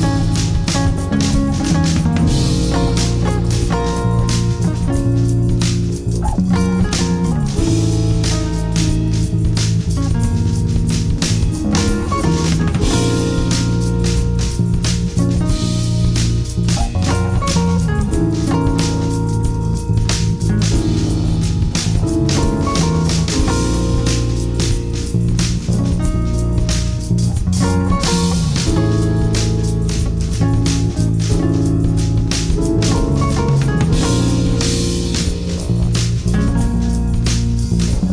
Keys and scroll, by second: 3.3 5, 3.6 Return, 5.6 ctrl+k, 5.9 space, 6.3 Escape, 7.6 alt+c, 7.6 alt+w, 8.0 p, 9.3 Escape, 12.3 shift+F2, 12.8 shift+Page_Up, 16.6 e, 17.2 Escape, 21.6 F3, 22.2 Escape, 22.6 F3, 23.6 F4, 28.7 shift+F2, 29.2 F3, 29.8 shift+Page_Up, 32.6 shift+F2, 33.1 Escape, 37.9 Escape.